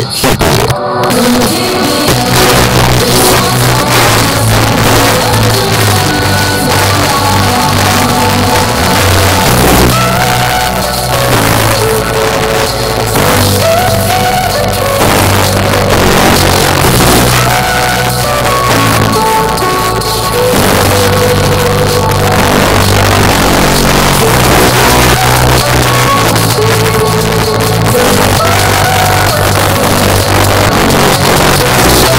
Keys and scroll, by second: 0.0 Down, 0.3 Down, 0.7 Return.